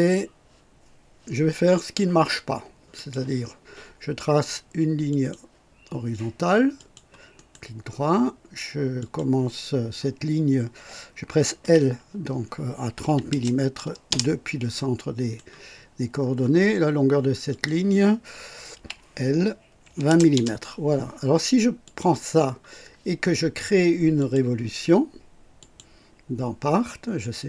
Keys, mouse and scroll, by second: 2.9 click, 5.1 click, 6.7 click, 7.3 right click, 8.9 click, 11.6 l, 13.0 KP_3, 13.3 KP_0, 14.0 KP_Enter, 14.7-15.5 right drag, 15.8 scroll up 1, 16.2 scroll down 1, 17.5 click, 18.7 l, 19.8 KP_2, 20.1 KP_0, 20.3 Return, 21.8 click, 22.6 scroll down 1, 22.9 typing, 24.2 click, 25.6 click.